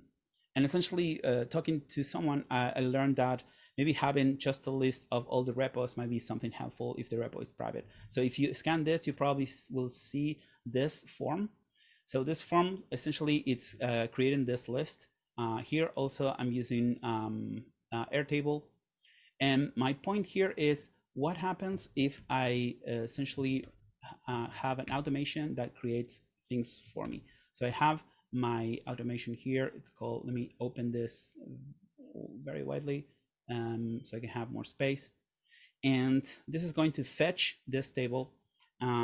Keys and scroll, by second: 8.2 super+Tab, 22.3 super+/, 23.2-24.4 typing, 25.0 Return, 26.7-27.7 typing.